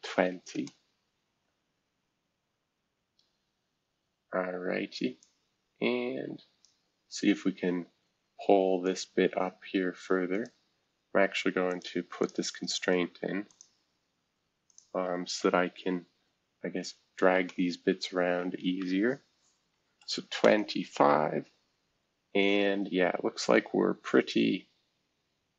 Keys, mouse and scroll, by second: 0.0-0.7 typing, 1.8 scroll down 1, 2.5-3.3 scroll up 2, 3.3 scroll up 1, 3.9 scroll up 1, 5.2-6.6 drag, 7.0-7.5 scroll down 1, 7.5 scroll up 1, 8.8-10.4 drag, 11.7 click, 12.2 click, 12.4-13.2 typing, 12.7-17.2 drag, 17.2 shift+h, 19.7 typing, 20.4 Return, 22.2-23.2 scroll up 3, 23.2-23.6 scroll up 1, 23.6 scroll down 3, 24.2 scroll up 4, 25.1 scroll up 2.